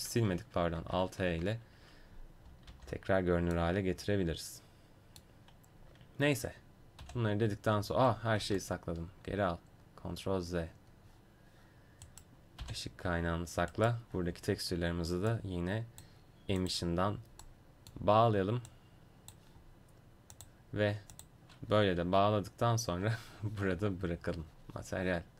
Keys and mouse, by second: 2.7 alt+h, 7.0 h, 9.0 ctrl+z, 12.1-15.8 right drag, 12.6 h, 15.3-24.3 drag, 18.7 right click.